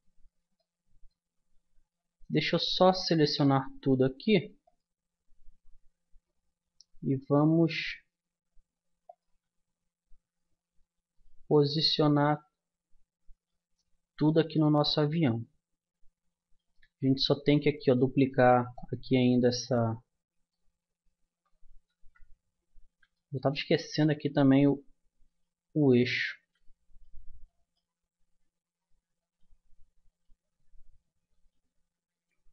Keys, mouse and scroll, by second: 0.0 Escape, 6.4 middle click, 6.7-9.1 middle drag, 9.1-10.8 drag, 11.1-13.5 right drag, 13.5 middle click, 18.7-20.3 middle drag, 20.3 click, 21.9 ctrl+z, 22.5 middle click, 23.1-25.1 drag, 25.3-27.2 drag, 29.2-32.5 drag.